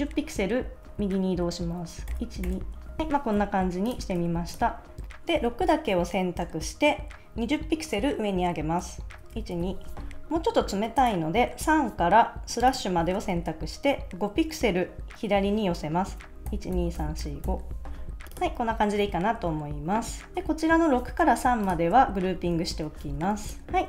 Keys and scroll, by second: 2.1 shift+Right, 3.0 super+s, 4.1 super+s, 9.3 shift+Up, 16.5 Left, 18.2 super+s, 22.5 super+g, 23.0 super+s.